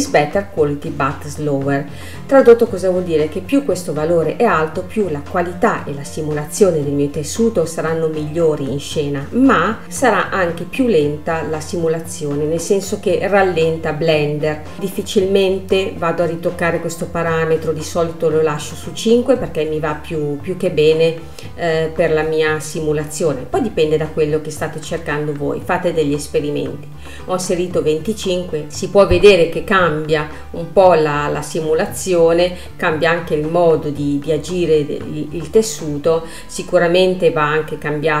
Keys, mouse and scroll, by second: 14.8 space, 15.3-18.3 middle drag, 21.1-26.0 drag, 27.5 space, 28.7 middle click, 29.4 scroll up 2, 30.0-30.6 scroll down 2, 30.6 middle click, 31.2 space, 31.9 space, 32.3 middle click, 32.8-34.1 scroll up 2, 34.1-38.2 middle drag.